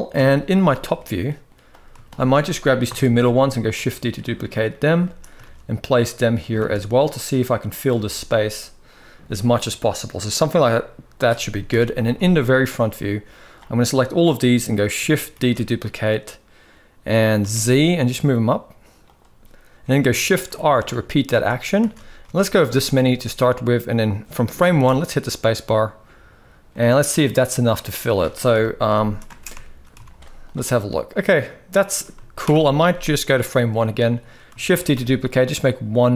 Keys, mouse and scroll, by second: 0.7-1.5 middle drag, 2.6 KP_7, 3.4 shift+d, 4.7 shift+middle click, 5.3 shift+d, 6.5 shift+d, 7.8-8.7 shift+middle drag, 10.3-11.4 middle drag, 11.4 KP_1, 11.8 z, 12.6-13.3 drag, 15.1 shift+d, 20.2-22.0 typing, 24.4 space, 25.4-26.7 middle drag, 27.5-28.2 middle drag, 28.2 KP_1, 29.0 space, 29.6 middle click, 29.7 z, 32.2 shift+Left, 34.4 shift+d.